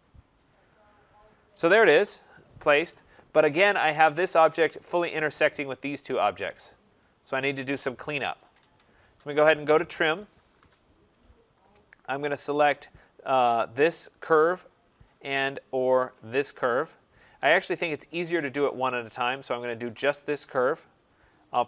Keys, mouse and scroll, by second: 1.4 click, 1.7 click, 3.0 click, 3.5 scroll, 3.8-4.1 scroll down 2, 4.2 click, 4.2 middle click, 5.0 click, 5.9 click, 6.9 click, 8.3 Escape, 8.5 Escape, 9.7-10.8 typing, 13.3 click, 16.4 click, 18.0 ctrl+click.